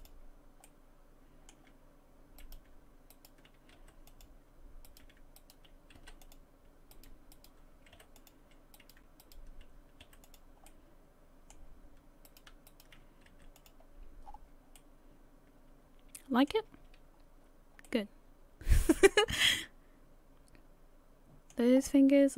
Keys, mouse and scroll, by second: 0.7 middle click, 2.4 right click, 3.1 shift+right click, 3.8 m, 4.9 right click, 5.4 shift+right click, 6.0 m, 6.9 right click, 7.3 shift+right click, 8.5 m, 8.8 right click, 9.2 shift+right click, 10.0 m, 10.7 middle click, 12.3 right click, 12.7 shift+right click, 13.3 m, 14.2-14.8 scroll down 5, 14.8 middle click, 16.6 a, 16.8 a, 17.1 scroll down 1, 17.8 scroll down 1, 17.9 middle click, 21.7 scroll up 4.